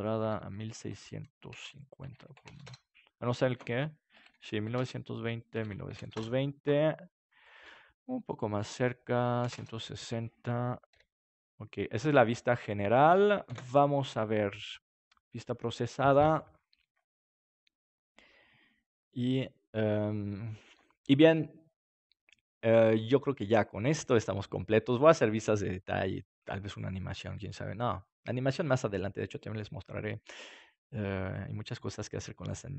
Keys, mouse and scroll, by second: 10.9 g, 13.4 ctrl+s, 13.4-19.6 drag.